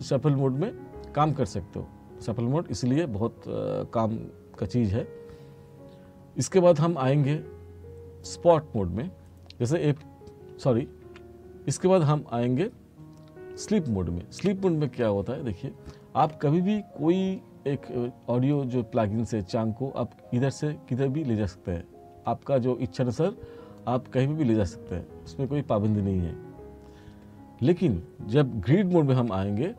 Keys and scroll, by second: 10.1 F2, 11.1 F1, 14.5 F2, 29.2 F4.